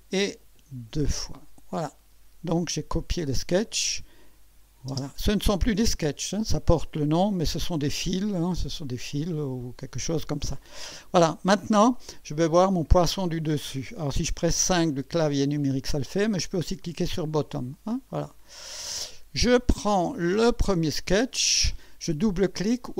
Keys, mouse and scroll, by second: 1.0 click, 4.9 space, 17.1 click, 18.1-18.8 right drag, 20.2 click, 22.8 right click.